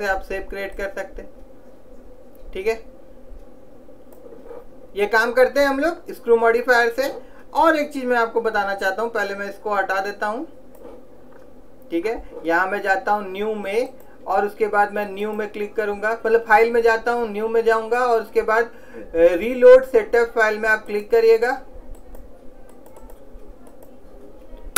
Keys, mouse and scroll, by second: 0.9 middle click, 0.9 click, 7.4-9.0 middle drag, 9.0 click, 12.2-14.1 middle drag, 14.1 click.